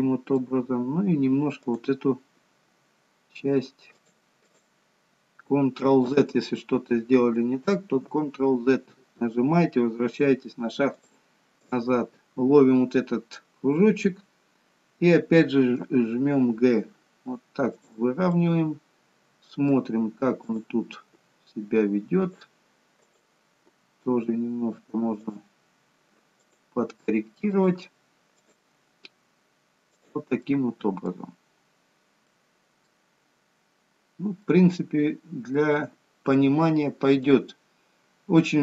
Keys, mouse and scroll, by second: 1.8 click, 2.5 g, 4.5 click, 6.2 ctrl+z, 8.0 ctrl+z, 10.9 click, 11.6 click, 18.4 middle click, 20.6 click, 21.3 g, 23.2 click, 23.8 g, 26.5 click, 27.0 g, 28.4 click, 29.0 g, 30.5 middle click, 31.3-31.9 scroll down 1, 31.9 scroll down 4, 32.3 middle click, 33.1-34.2 scroll down 5, 34.2-34.7 scroll up 2, 34.5 middle click, 37.6-38.6 scroll up 5.